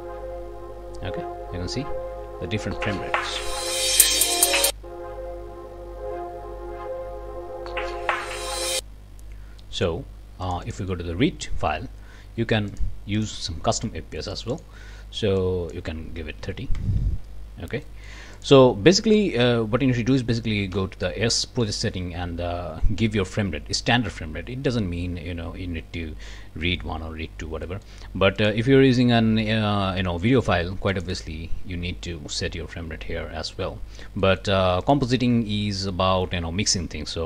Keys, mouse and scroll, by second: 8.7 click, 9.6 click, 10.4 click, 12.7 click, 13.1 click, 14.3 click, 15.4-15.9 drag, 16.2-17.0 typing, 17.9 click, 18.3 click, 20.2 click, 20.7 s, 27.7 click, 28.4 click, 30.9 click, 34.2 click, 34.8 click.